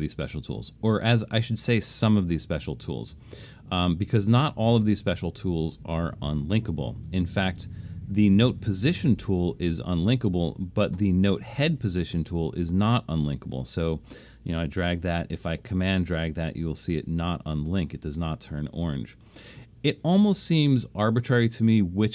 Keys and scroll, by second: 15.0 BackSpace, 19.2 BackSpace.